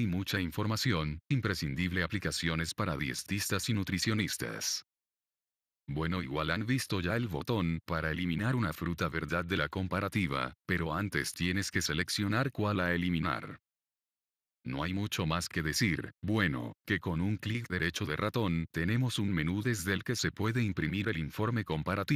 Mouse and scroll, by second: 10.2-11.3 right drag, 11.7 click, 13.0-14.0 drag, 17.9 click.